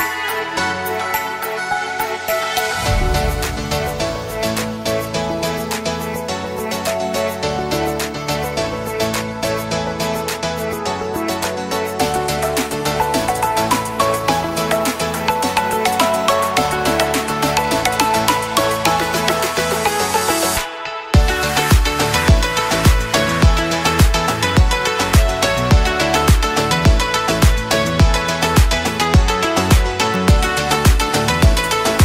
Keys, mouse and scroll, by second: 5.9 ctrl+d, 11.0-11.3 drag, 12.1-12.7 drag, 14.0 drag, 14.4 right click, 15.4-16.7 drag, 24.9-26.2 shift+drag.